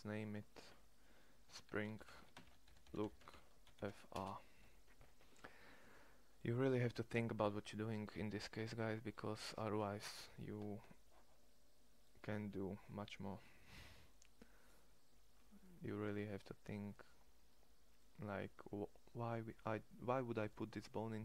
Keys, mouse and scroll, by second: 2.7 o, 4.8 click, 4.9 o, 8.7 middle click, 11.0-12.1 middle drag, 20.3 middle click.